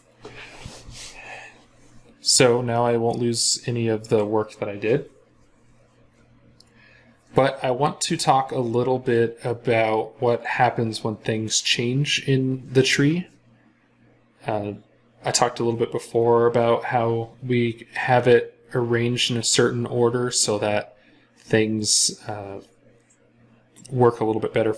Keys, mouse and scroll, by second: 2.6 middle click.